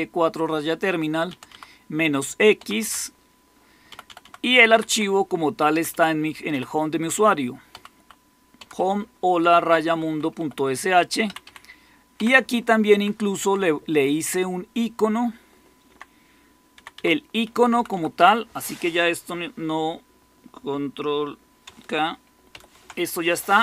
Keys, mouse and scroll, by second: 1.2 Right, 1.4 Right, 2.5 Right, 2.7 Right, 3.8 Right, 4.1 Right, 4.4 Left, 4.6 Left, 4.8 Left, 5.6 Right, 5.8 Right, 6.4 Left, 7.0 Left, 7.6 Right, 7.9 Right, 8.5 Right, 8.7 Right, 8.9 Right, 9.6-10.0 Right, 10.3 Right, 10.3 Right, 11.2 Down, 11.4 Down, 12.1 Down, 12.8 Up, 13.3 Down, 14.0 Left, 14.5-15.9 Left, 14.5 typing, 16.7 Left, 17.1-18.3 typing, 22.4 ctrl+k.